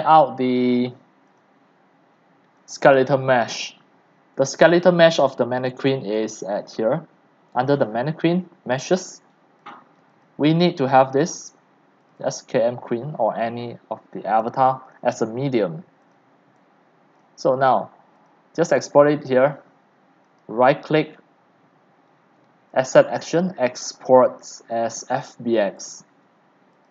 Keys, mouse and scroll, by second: 1.6 click, 2.5 click, 2.7 click, 4.7 click, 7.5 click, 8.6-13.9 drag, 14.9 click, 18.5 click, 22.8-26.9 drag.